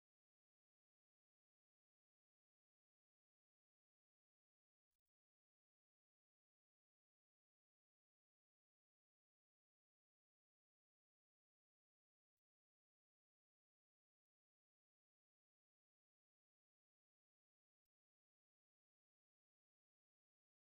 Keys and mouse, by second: 0.1 right click, 1.0 middle click, 3.0 middle click, 3.4 shift+middle click, 3.9 middle click, 4.7 o, 4.9 middle click, 6.0 middle click, 6.0 right click, 8.0 c, 12.6 q, 13.4 w, 15.5 middle click.